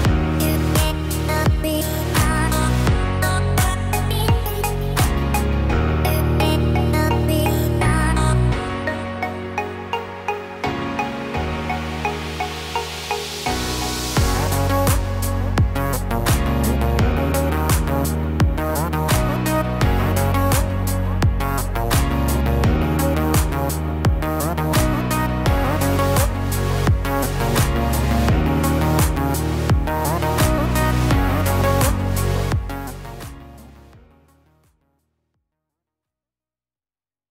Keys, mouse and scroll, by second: 4.3 F12.